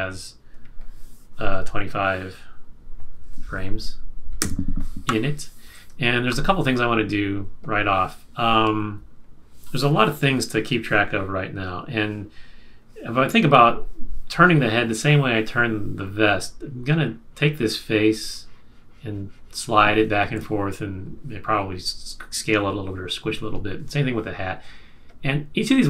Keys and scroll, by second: 4.4 F5, 6.2 super+-, 20.2 super+z.